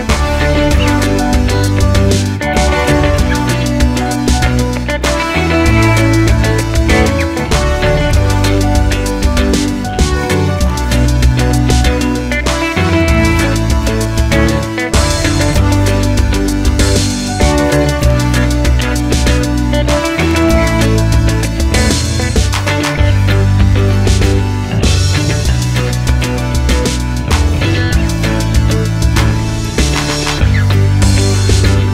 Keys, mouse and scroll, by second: 1.9 alt+d, 3.0 r, 3.9 click, 4.0 g, 5.0 click, 5.1-7.4 middle drag, 6.3 alt+d, 7.4 click, 7.8 alt+d, 8.1 click, 8.2 r, 8.6 click, 8.7 g, 9.6 click, 9.7-11.3 middle drag, 10.8 g, 11.3 click, 11.4-11.9 middle drag, 11.9 click, 12.3 h, 12.5-13.6 middle drag, 13.6 click, 14.0-17.4 middle drag, 15.1 x, 16.6 scroll down 1, 17.4 click, 17.8 h, 18.1-20.6 middle drag, 19.2 scroll down 1, 20.2 scroll up 1, 20.6 click, 21.0 middle click, 21.3 click, 21.8 g, 23.2 click, 23.4 click, 23.7 click, 24.0 g, 25.5 click, 25.7 g, 26.2 click, 26.2 middle click, 26.8 click, 26.9 g, 27.8 click, 28.0 g, 29.0 click, 29.2 g, 29.6 click, 30.1 click, 30.3 g, 31.8 click.